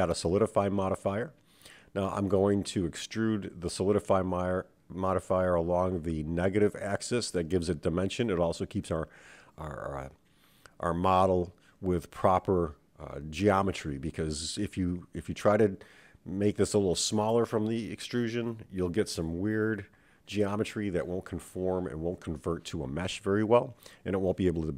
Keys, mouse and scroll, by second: 2.3-5.3 drag, 5.9-8.4 right drag, 16.7-17.1 scroll down 3, 17.1-17.9 scroll up 3, 17.9 click, 18.6-19.9 scroll down 2, 20.1 click, 22.4-24.7 drag.